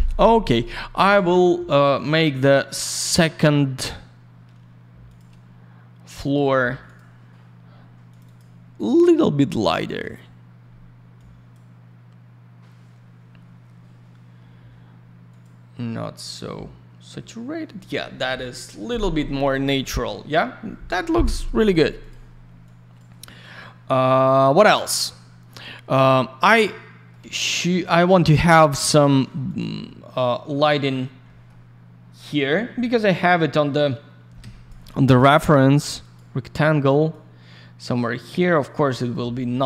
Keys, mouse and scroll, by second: 0.4 click, 0.5 click, 1.9 middle click, 2.1 middle click, 3.0 scroll down 1, 3.3 middle click, 3.5 middle click, 3.8-4.4 scroll up 1, 5.0 click, 5.1 click, 6.2 click, 6.3 click, 6.8 click, 6.9 click, 7.7-8.1 scroll up 1, 8.1 click, 8.1 click, 8.2 click, 8.3 double click, 10.0 click, 10.1 click, 11.1 click, 15.3 click, 15.4 click, 21.6 click, 21.7 click, 22.0 click, 22.0 click, 22.6 click, 26.6 alt+middle click, 27.2 alt+я, 27.3 click, 27.8 alt+middle click, 28.7 click, 28.8 click, 29.4 click, 29.6 click, 29.8 alt+middle click, 30.5-30.8 scroll up 1, 31.2 middle click, 33.7 click, 34.4 Escape, 35.4 click, 35.5 click, 36.0 click, 36.1 click, 37.1 click, 38.9 middle click, 39.1 middle click, 39.3 alt+middle click.